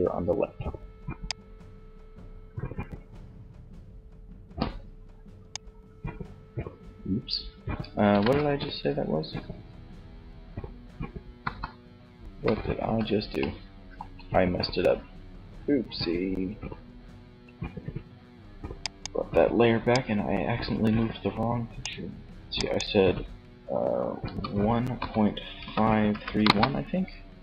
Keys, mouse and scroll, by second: 0.4-2.2 drag, 8.2 ctrl+z, 10.6 KP_1, 17.9-20.7 drag, 21.7-23.5 drag.